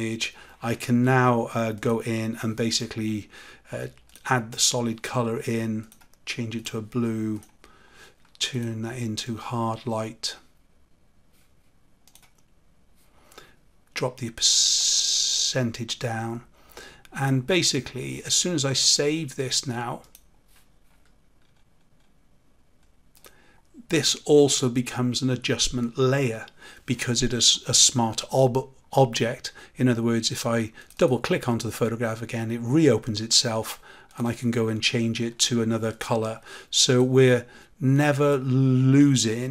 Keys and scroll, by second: 39.2 ctrl+s.